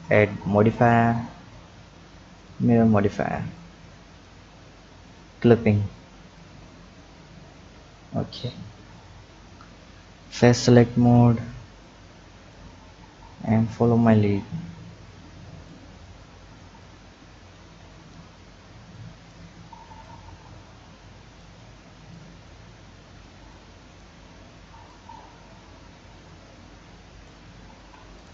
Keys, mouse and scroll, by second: 0.1-3.2 drag, 3.5 click, 5.1 click, 6.4 click, 7.7 Tab, 8.1-8.9 scroll down 2, 8.9 click, 10.2 click, 11.0 click, 11.8-12.7 drag, 12.7-13.5 scroll down 2, 13.5-15.7 drag, 16.8-17.7 drag, 17.7 Tab, 18.9 click, 20.0-22.1 drag, 22.7-23.5 scroll up 2, 23.5 click, 24.9-27.7 drag, 27.7 ctrl+z, 28.1 click.